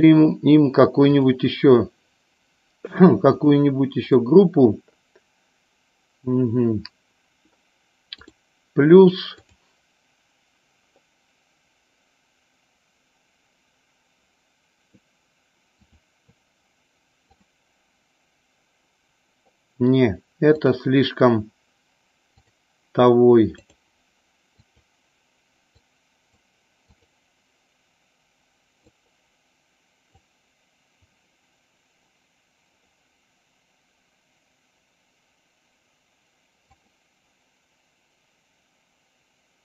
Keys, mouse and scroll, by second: 1.4 click, 3.5 click, 4.1 click, 8.2 click, 9.6-16.1 drag, 17.4 click, 20.7 click, 22.5-23.9 drag, 24.7 click, 26.9 click, 36.8 click.